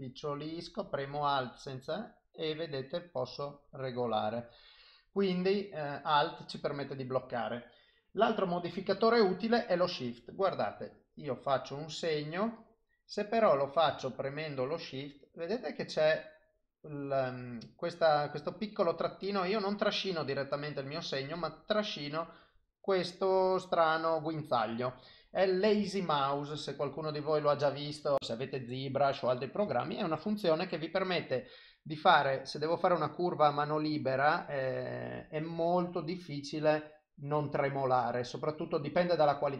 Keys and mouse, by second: 10.7 click, 14.2 shift+click, 26.1 shift+click, 28.0 click, 28.2 shift+click, 29.1 click, 31.7 click, 35.8 click, 39.2 click.